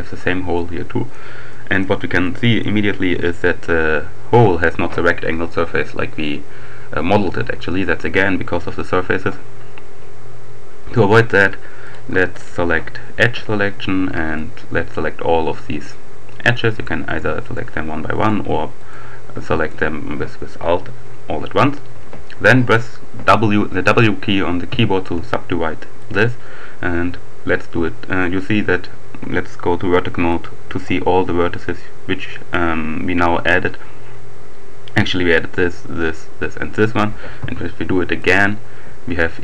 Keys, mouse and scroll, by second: 0.6-1.6 drag, 2.3 click, 3.0-3.6 scroll up 1, 11.9 click, 14.0 alt+click, 16.6-18.0 drag, 18.1 click, 19.5 alt+click, 22.9 w, 25.3-26.6 drag, 30.1 click, 37.3 w, 38.1 click.